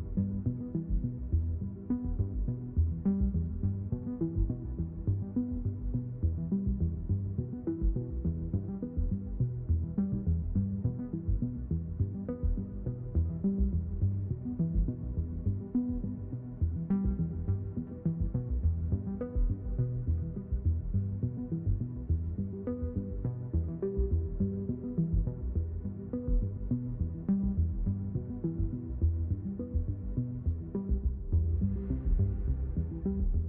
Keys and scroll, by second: 24.6-26.0 typing.